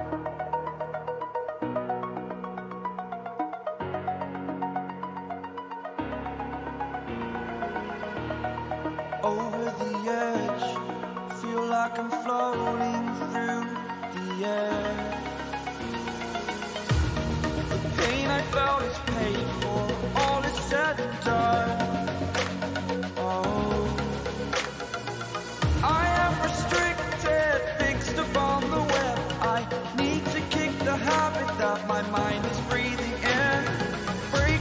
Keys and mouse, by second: 0.4 click, 2.4-9.8 drag, 16.6 click, 19.3 shift+click, 20.6 ctrl+t, 23.3-26.6 drag, 27.8 click, 32.4 click.